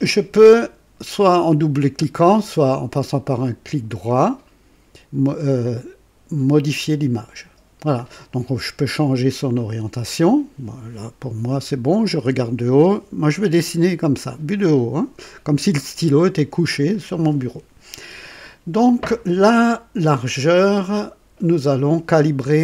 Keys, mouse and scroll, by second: 4.4 right click, 6.7 click.